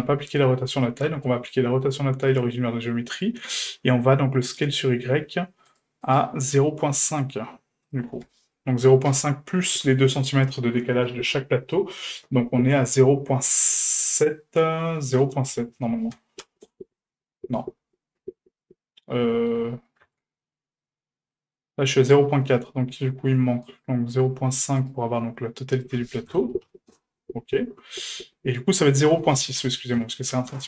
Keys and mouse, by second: 1.1 q, 4.7-5.9 drag, 6.0 right click, 7.0 right click, 7.9-17.7 drag, 18.6-19.5 middle drag, 20.1 ctrl+z, 20.6-21.3 middle drag, 22.0-22.3 middle drag, 22.7 middle drag, 23.6 right click, 24.8 right click, 25.7-27.5 drag, 28.9-30.6 drag.